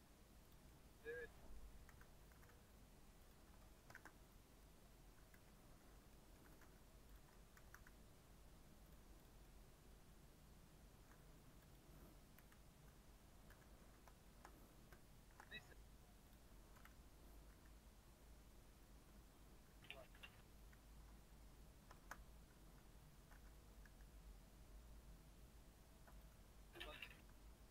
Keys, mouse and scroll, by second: 0.7 middle click, 1.6 g, 2.3 g, 3.5 middle click, 3.9 shift+d, 5.3 KP_Decimal, 6.1 middle click, 6.4 g, 7.5 g, 9.2 click, 9.4-11.7 middle drag, 11.7 click, 12.3 KP_1, 13.4 KP_3, 14.2 shift+middle click, 14.5-14.9 scroll down 3, 15.3 shift+d, 16.7 KP_1, 17.5 r, 19.0 Tab, 19.3 scroll up 2, 19.7 r, 20.9 Tab, 21.5 scroll up 2, 21.9 shift+middle click, 22.7 z, 23.3 alt+z, 23.8 r, 26.3 g, 27.1 r.